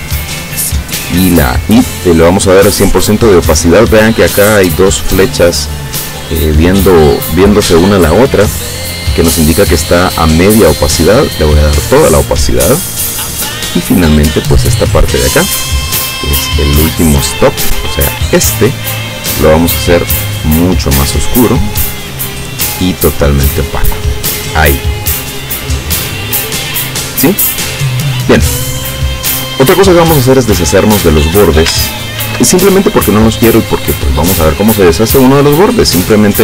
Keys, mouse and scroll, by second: 10.9 click, 13.8 click, 17.4-18.7 drag, 19.9 click, 20.7-21.9 drag, 22.9 click, 25.5 click, 26.3 click, 28.3 click, 32.3 ctrl+shift+f, 33.3 click.